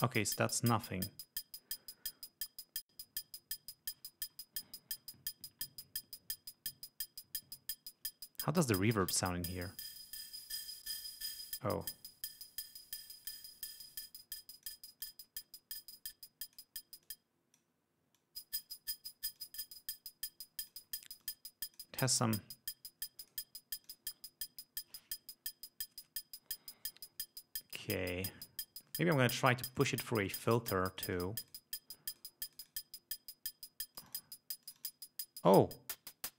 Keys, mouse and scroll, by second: 9.4-13.6 drag, 14.0-15.0 drag, 15.2-16.9 drag, 17.2-17.9 drag, 18.3-19.0 drag, 19.5-21.0 drag, 21.4 click, 23.4 click, 24.0 click, 29.8 click, 30.4 click, 31.1 click, 32.3 click, 32.6 click, 34.1 click, 34.8 click, 35.6-36.3 drag.